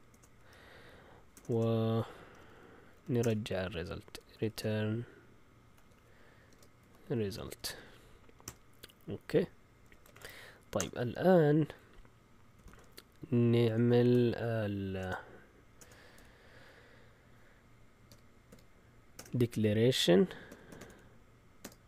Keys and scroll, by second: 0.0-10.6 typing, 2.2 Down, 3.2 Return, 10.7 Return, 12.3-16.6 typing, 18.0-21.8 typing.